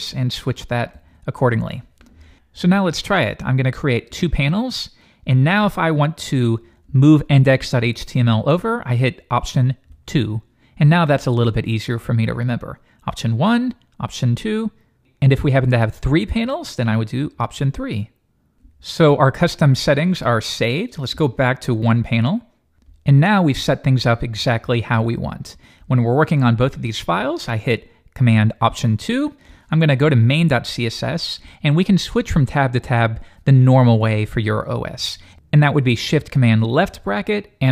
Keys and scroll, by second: 4.1 alt+super+2, 6.8 shift+super+], 28.6 alt+super+2, 29.9 shift+super+], 36.7 shift+super+[.